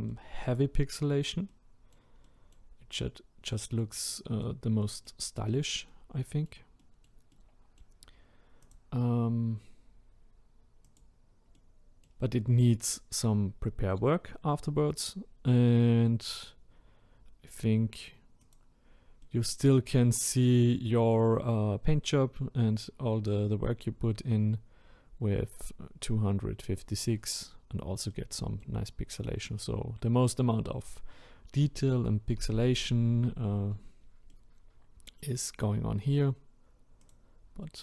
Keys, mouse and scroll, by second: 3.1-3.5 scroll down 1, 3.5-8.6 middle drag, 8.6 click, 10.9 click, 11.6-18.5 middle drag, 18.5 click, 19.3-19.9 middle drag, 19.9-20.5 scroll up 1, 20.5-22.5 middle drag, 22.5-25.1 scroll up 1, 28.1-28.9 middle drag, 28.9-29.4 scroll down 1, 29.4-37.8 middle drag.